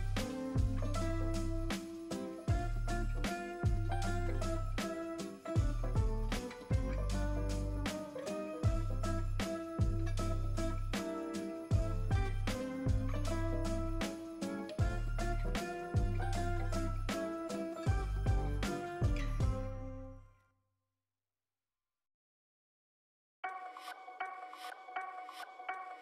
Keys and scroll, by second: 2.2 space, 2.9 [, 7.2 space, 10.9 space, 18.1 space, 19.1 space, 20.9 ], 21.3 space, 21.8 space, 22.2 [, 24.6 space, 24.8 space.